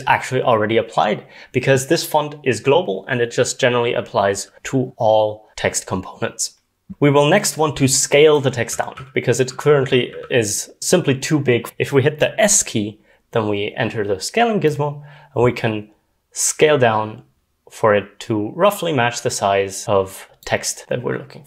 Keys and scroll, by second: 8.7-10.8 typing.